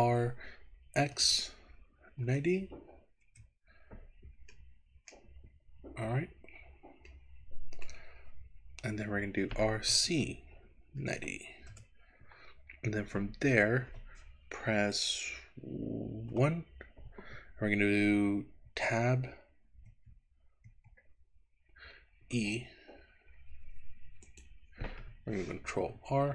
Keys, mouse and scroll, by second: 0.0 r, 1.0 x, 2.1 KP_9, 2.3 KP_0, 3.3 KP_Enter, 4.6 middle click, 5.1-6.3 scroll down 6, 6.3-7.3 scroll up 5, 7.3 middle click, 8.3-8.9 scroll up 1, 8.9-9.6 scroll up 1, 9.6 r, 9.9 z, 11.0 KP_9, 11.2 KP_0, 11.7 KP_Enter, 16.4 KP_1, 18.7 Tab, 19.9 Tab, 22.2 e, 24.4 click, 26.0 ctrl+r.